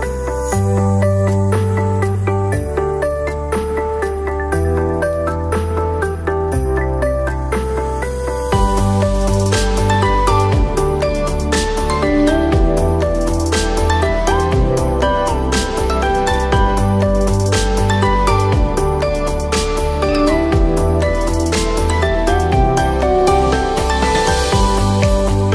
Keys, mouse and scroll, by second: 1.1 click, 3.1-5.5 drag, 8.6 click, 11.3-13.4 drag, 15.2 click, 17.3-19.3 alt+drag, 20.2 ctrl+t, 21.0-25.5 drag.